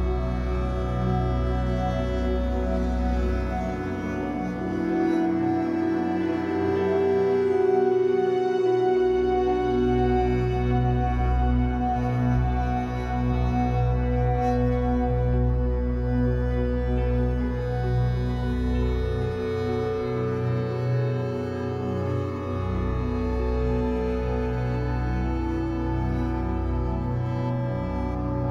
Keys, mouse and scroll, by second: 0.2-0.7 middle drag, 0.7-1.5 scroll down 3, 1.5-2.6 shift+middle drag, 2.6 scroll up 3, 3.4 alt+middle click, 3.7 alt+middle drag, 4.1-4.4 shift+middle drag, 4.4 scroll up 2, 4.7 Tab, 4.9 scroll down 1, 5.1 shift+middle click, 5.4-8.1 typing, 5.8 click, 9.4 click, 9.8 click, 10.3 g, 12.6 click, 13.2 l, 13.7 shift+d, 14.3 r, 16.4 g, 17.4 shift+middle click, 17.7-18.1 scroll up 3, 18.1 shift+d, 18.4 r, 19.7-23.2 typing, 23.6 Tab, 23.6 scroll down 5, 24.0 click, 24.2-24.7 scroll down 3, 24.7-26.1 shift+middle drag, 26.1-26.6 scroll down 4, 26.6-27.7 middle drag, 27.7-28.1 scroll up 5, 28.1-28.5 shift+middle drag.